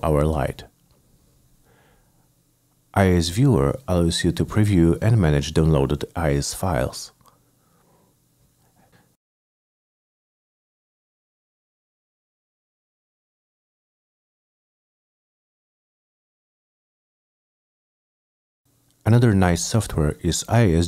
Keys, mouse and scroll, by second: 1.8 click, 4.4 click, 4.5 click, 5.5 click, 7.1 click, 7.3 right click, 7.8 click, 8.2 click, 8.6 click, 9.2 click, 9.5 click, 9.9 click, 10.5 click, 11.6 click, 13.0 click, 13.6 click, 14.7-16.3 drag, 16.6-17.7 drag, 18.2 click, 18.6 click.